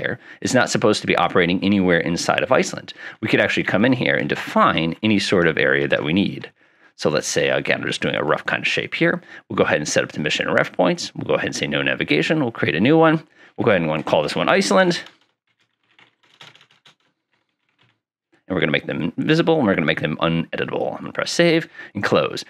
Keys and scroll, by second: 3.8 ctrl+Insert, 4.3 ctrl+Insert, 4.8 ctrl+Insert, 14.5-18.3 typing.